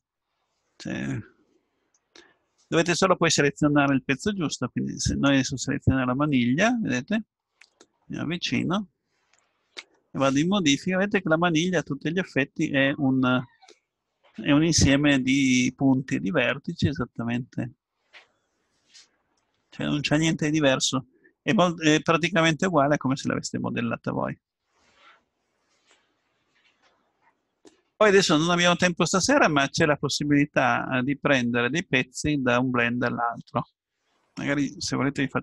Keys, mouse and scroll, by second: 0.9 middle click, 5.1-6.9 right drag, 7.4-8.1 scroll up 1, 8.1-8.8 scroll up 1, 9.9 Tab, 15.0-16.1 middle drag.